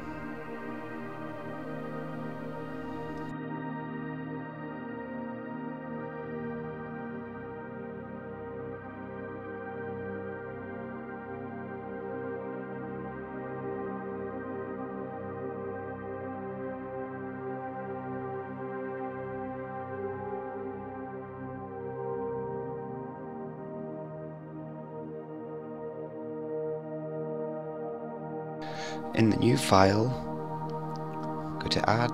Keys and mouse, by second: 20.4 click, 23.5 ctrl+s, 24.5 middle click, 26.9-28.2 drag, 31.4-32.1 drag.